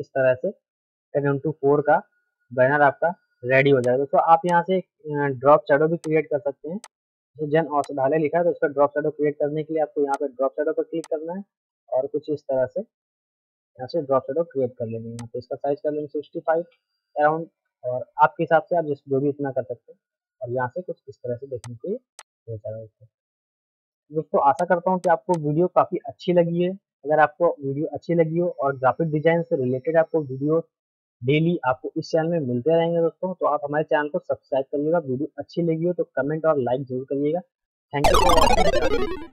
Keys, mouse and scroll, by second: 1.5 middle click, 3.8 click, 5.5 ctrl+u, 6.0 click, 8.6 ctrl+z, 10.1-16.3 drag, 16.3 Tab, 17.5 Up, 19.4 ctrl+k, 20.5 F3, 21.7-23.9 drag, 23.9 ctrl+g, 24.5-25.4 typing, 24.5 shift+click, 25.0-26.7 drag, 26.7 shift+F2.